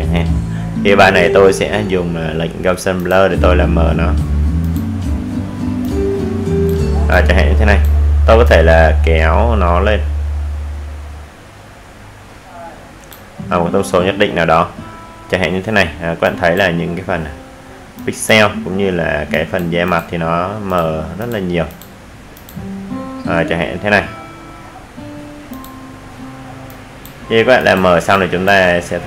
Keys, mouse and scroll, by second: 6.7 click, 16.0-19.7 drag, 26.9 click.